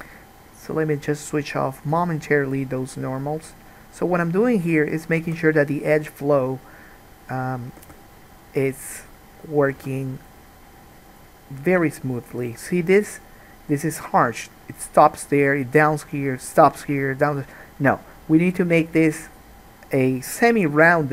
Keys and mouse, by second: 2.2-4.8 drag, 5.3 g, 7.4 click, 7.9 g, 9.2 click, 9.8 g, 12.8-21.1 middle drag.